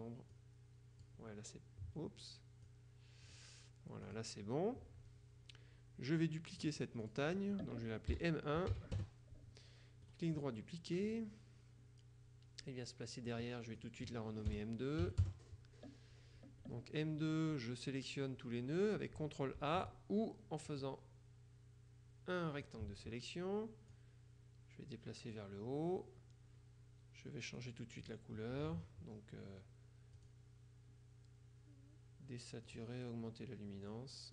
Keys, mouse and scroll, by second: 2.7 click, 4.1 click, 6.7 click, 8.2 m, 9.0 KP_Enter, 10.1 right click, 11.1 click, 13.3 click, 14.6 BackSpace, 15.1 KP_2, 15.3 KP_Enter, 19.7 ctrl+a, 20.8-23.3 drag, 24.0-25.9 drag, 27.7 click, 30.3 click, 32.8 click, 34.0 click.